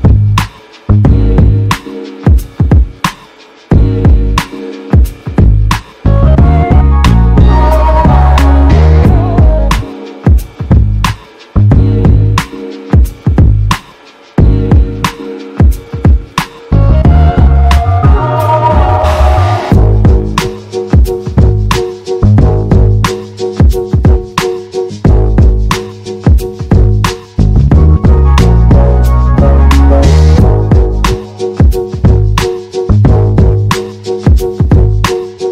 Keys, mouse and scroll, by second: 8.6 e, 17.7 r, 32.6 e.